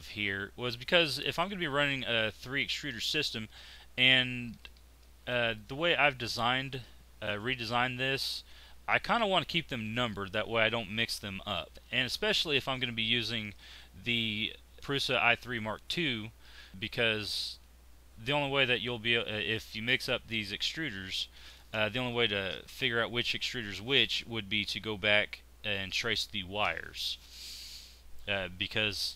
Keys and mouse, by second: 5.2 click, 5.8 middle click, 12.5-14.8 drag.